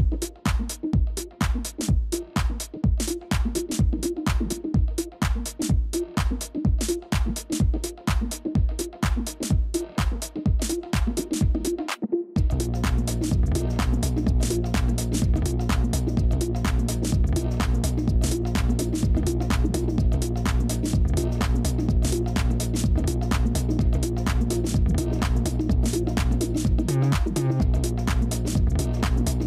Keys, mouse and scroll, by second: 0.4 typing, 2.3 typing, 3.4-4.1 scroll down 1, 4.1 scroll, 4.2 typing, 10.0 alt+click, 11.7 double click, 12.7-19.0 typing, 20.0-22.0 typing, 25.2-26.9 typing, 28.5-29.4 typing.